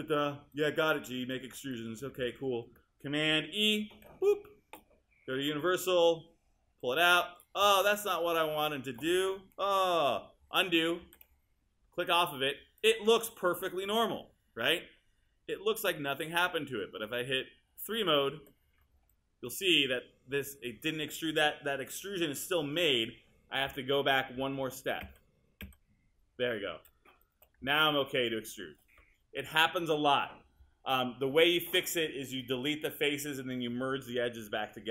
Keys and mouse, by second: 4.0 super+e, 11.1 super+z, 18.4 3, 24.6 super+z.